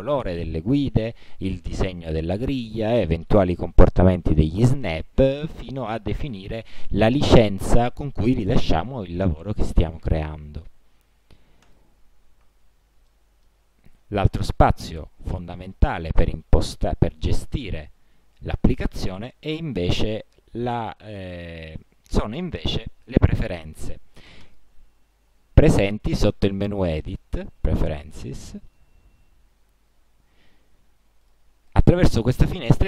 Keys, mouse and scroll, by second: 1.0 click, 2.8 click, 5.7 click, 11.8 click, 13.2 middle click, 24.6 click, 28.5 click, 30.1-31.4 scroll up 2, 31.4 click, 31.7 scroll up 1, 31.9 click, 32.5 click.